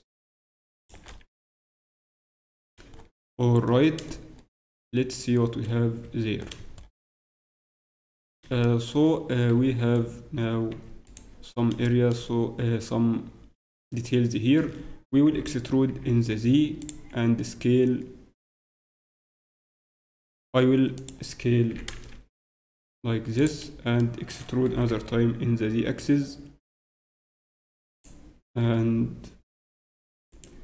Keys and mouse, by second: 1.2 z, 1.8 Tab, 1.8 z, 1.9 z, 2.3 z, 6.0 Tab, 9.5 z, 16.8 e, 19.7 g, 21.7 s, 24.6 e, 28.5-30.3 middle drag, 30.3-30.6 right drag.